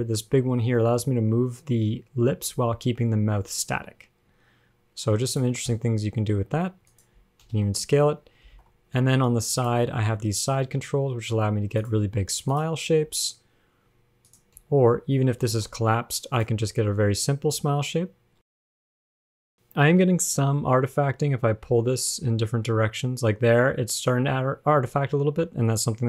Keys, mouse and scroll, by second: 0.9 g, 6.0 s, 7.7 super+r, 8.7 alt+r, 8.8 alt+g, 9.2 alt+s, 9.8 click, 10.5 g, 12.7 click, 13.5 g, 14.8 a, 15.7 alt+r, 15.7 alt+g, 16.6 click, 17.2-17.8 scroll down 2, 17.9 g, 19.4 scroll up 4, 20.1-20.7 scroll up 1, 20.7-23.1 scroll up 1, 20.7 g.